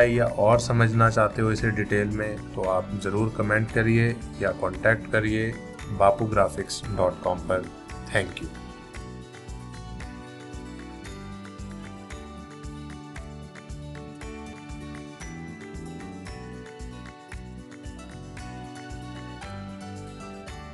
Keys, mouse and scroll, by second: 9.4 v.